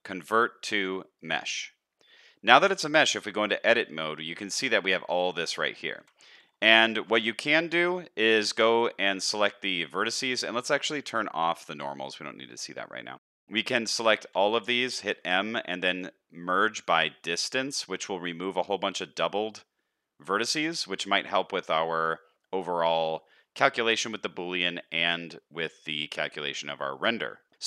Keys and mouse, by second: 2.0 middle click, 2.4 shift+middle click, 3.1 Tab, 4.0 middle click, 5.1 middle click, 6.0 1, 6.3 middle click, 6.9 alt+a, 7.2 middle click, 8.0 middle click, 14.2 a, 15.1 m, 17.9-21.2 middle drag, 21.9 middle click, 23.1 middle click, 24.4 middle click, 25.6 middle click, 27.5 Tab, 27.5 middle click.